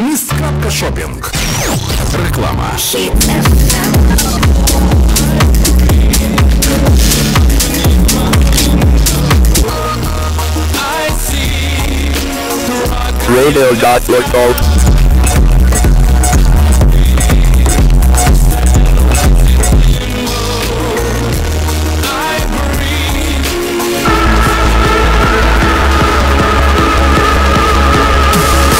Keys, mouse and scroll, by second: 9.7 Page_Down, 20.5 Page_Down.